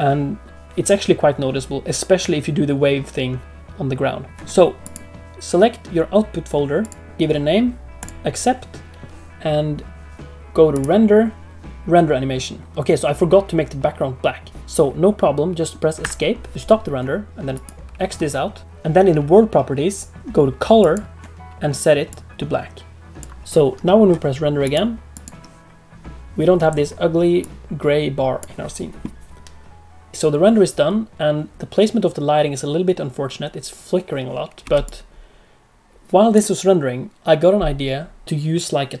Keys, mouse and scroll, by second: 4.8 click, 6.8 click, 10.7 click, 20.8 click, 24.6 click.